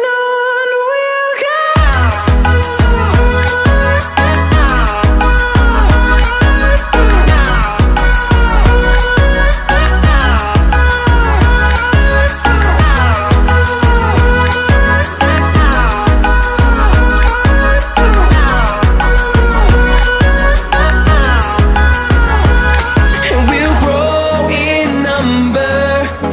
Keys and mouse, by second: 0.4 middle click, 0.8 middle click, 1.4 r, 3.0 click, 3.4 middle click, 4.4 click, 5.5 click, 6.3 middle click, 6.8 click, 7.1 r, 8.6 r, 10.4 middle click, 11.6 middle click, 12.7 s, 13.1 middle click, 13.8 click, 14.6 r, 15.8 x, 16.4 r, 18.4 click, 19.0 KP_0, 19.6 KP_0, 19.9 click, 20.6 middle click, 22.0 middle click, 22.8 middle click, 23.0 middle click, 24.7 click, 25.1 middle click, 25.8 middle click.